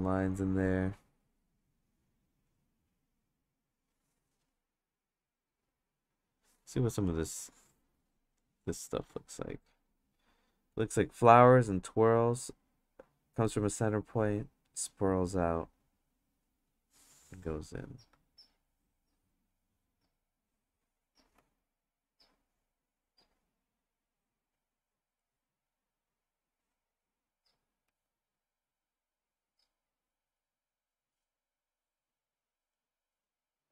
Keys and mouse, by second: 0.4 click, 2.5 click, 3.7 click, 7.1-8.3 drag, 9.0 click, 10.8-17.6 drag, 18.5 click, 20.3 click, 21.4 ctrl+z, 22.0-23.2 drag, 24.0-25.2 drag, 26.2-27.5 drag, 27.8 ctrl+z, 28.5 click, 31.7-32.7 drag.